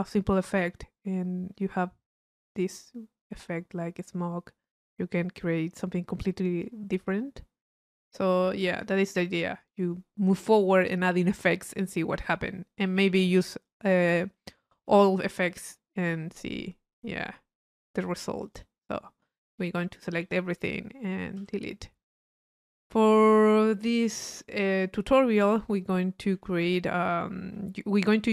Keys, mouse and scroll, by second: 2.2-3.6 drag, 7.5 middle click, 8.2-10.4 drag, 18.3 click, 19.3-21.0 right drag, 22.2-24.2 middle drag, 27.5 c.